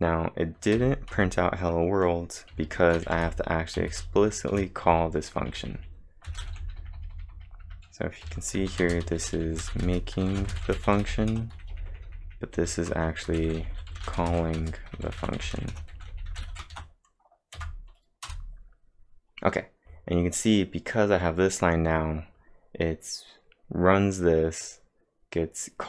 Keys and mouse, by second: 0.0-0.8 typing, 1.1 Return, 2.5-8.8 typing, 9.9-16.6 typing, 16.7 ctrl+`, 17.6 Up, 18.3 Return.